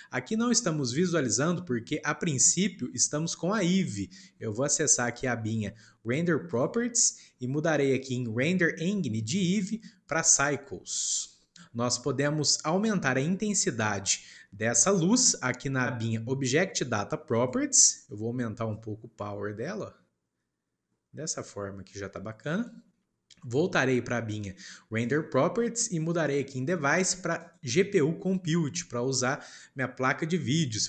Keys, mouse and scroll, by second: 9.2-12.0 drag, 18.6-21.7 drag, 27.4-30.8 drag.